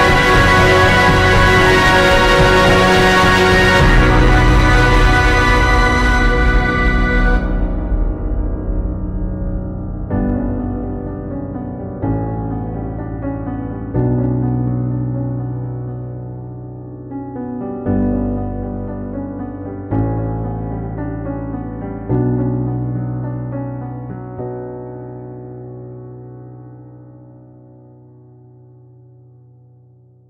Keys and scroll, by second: 0.4 ctrl+t, 0.6 ctrl+g, 0.7-2.3 typing, 8.7 ctrl+t, 10.4 ctrl+j, 10.8 ctrl+t, 12.1 Down, 12.2-13.5 typing, 21.3 ctrl+i, 21.4 b, 21.9 ], 24.1-25.5 typing, 27.1 [, 28.8 space, 29.9 space.